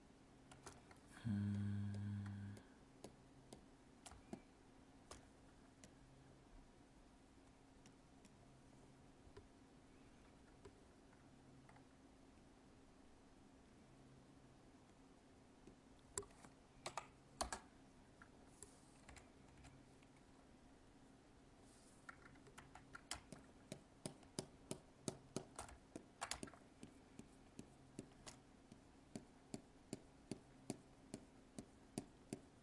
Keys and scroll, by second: 22.6 ctrl+z.